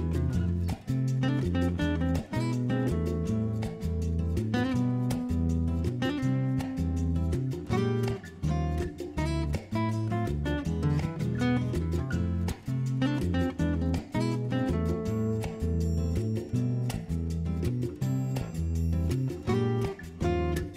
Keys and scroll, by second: 3.0 super+z, 3.1-4.1 typing, 9.4-9.8 typing, 11.6 typing.